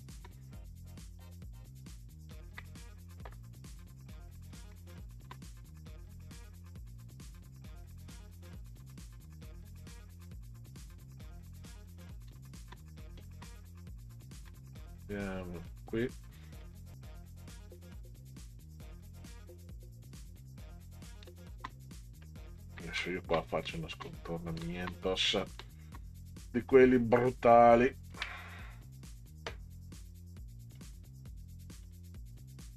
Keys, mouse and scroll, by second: 2.3 ctrl+click, 4.5 ctrl+click, 4.9 space, 6.9 click, 7.9 click, 8.9 click, 10.3 click, 11.5 click, 12.3 space, 15.7 ctrl+click, 16.6 ctrl+click, 18.4 click, 19.2 click, 20.4 click, 21.3 space, 22.0-22.3 scroll down 1, 23.0 space, 23.3-23.7 scroll up 1, 23.7 scroll down 1, 23.7 space, 24.0-24.3 scroll up 1, 24.3-24.6 scroll down 1, 24.6 space, 24.9 scroll up 1, 25.1-25.9 scroll down 1, 25.6 space, 25.9-26.6 scroll up 1, 28.0 ctrl+click, 29.1 click, 30.8 click, 31.8 click.